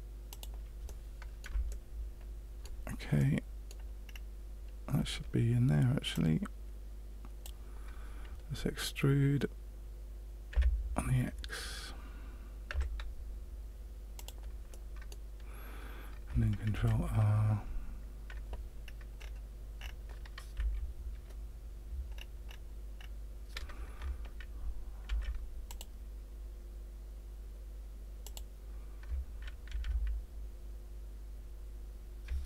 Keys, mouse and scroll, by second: 0.8 middle click, 1.6 shift+middle click, 3.1 middle click, 4.0-4.6 scroll down 2, 6.1 click, 10.5 e, 14.7 middle click, 16.7 ctrl+r, 22.1-22.5 scroll up 4, 23.0-23.9 scroll down 1, 25.0 ctrl+r, 29.6 ctrl+r.